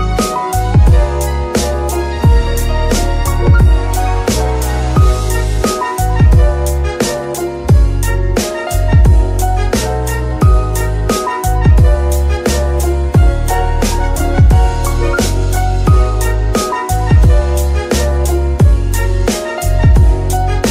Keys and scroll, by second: 17.7 Tab, 18.5 s, 19.5 Tab, 19.9 s.